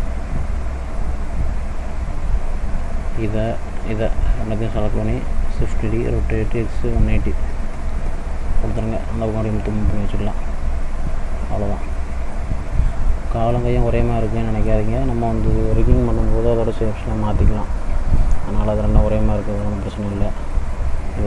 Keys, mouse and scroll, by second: 0.0 click, 1.5 n, 2.5 click, 3.9 shift+click, 4.7 middle click, 5.7 shift+d, 9.7 click, 12.0 middle click, 13.2 middle click, 13.7 scroll up 1, 14.3 middle click, 15.8 middle click, 16.2-16.7 scroll up 2, 17.0 middle click, 17.7-18.1 scroll down 1, 18.1 middle click, 19.2 middle click.